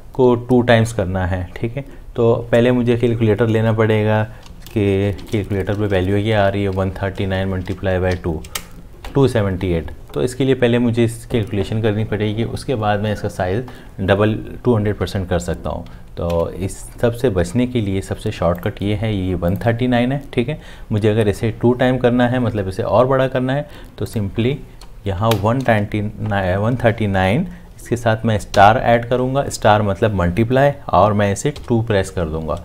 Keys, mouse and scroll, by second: 4.9 c, 5.2 c, 5.9 Return, 6.2-8.1 typing, 8.4 Return, 16.3 alt+Tab, 25.2 Left, 28.5 *, 31.6 2.